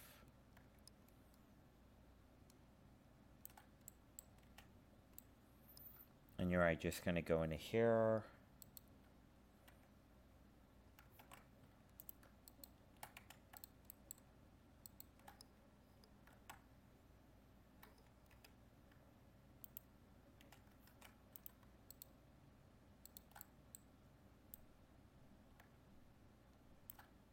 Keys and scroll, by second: 11.2 ctrl+shift+5, 20.9 ctrl+Tab.